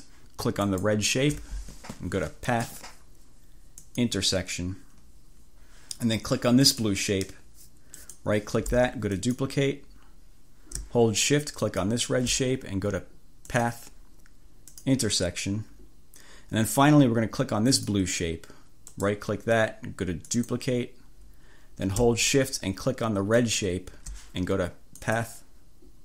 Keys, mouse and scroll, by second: 0.7 shift+click, 2.6 click, 3.9 click, 6.7 click, 8.0 click, 9.2 click, 11.7 shift+click, 13.5 click, 14.8 click, 17.7 click, 19.1 middle click, 20.3 click, 23.4 click, 25.1 click.